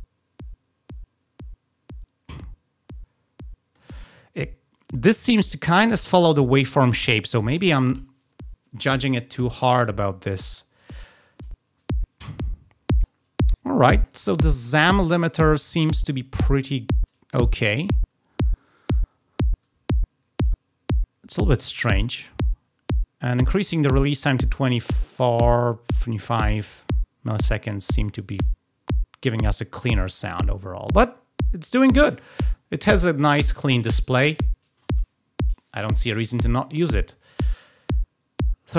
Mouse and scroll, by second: 11.3-13.0 drag, 14.0 click, 14.7-16.6 drag, 20.4-26.6 drag.